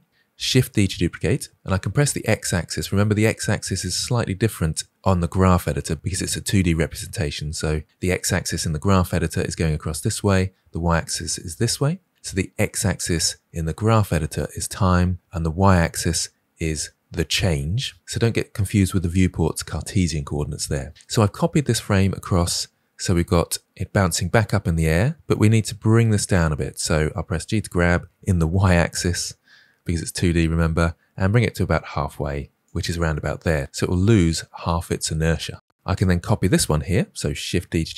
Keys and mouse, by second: 0.5 shift+d, 27.3 g, 35.9-36.3 drag, 37.5 shift+d.